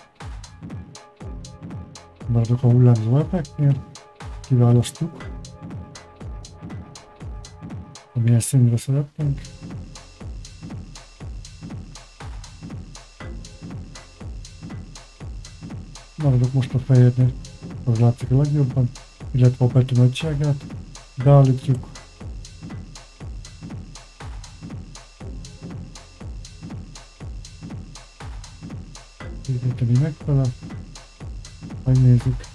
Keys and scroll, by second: 0.0-1.0 typing.